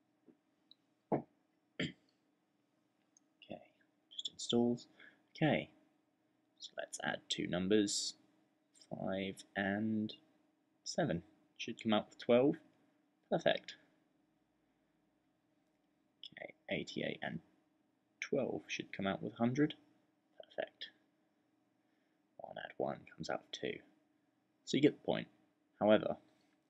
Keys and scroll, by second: 8.4 5, 10.6 7, 13.1 typing, 16.0-16.6 typing, 17.8-18.6 typing, 20.7-21.4 typing, 24.6 typing.